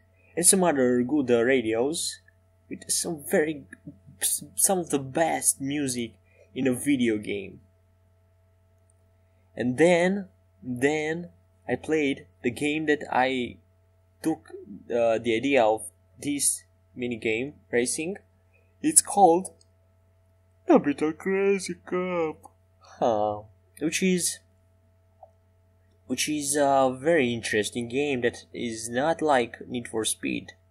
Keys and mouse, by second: 1.0 middle click, 13.4 e, 13.9 s, 17.5 e, 21.3 e, 30.5-30.7 middle drag.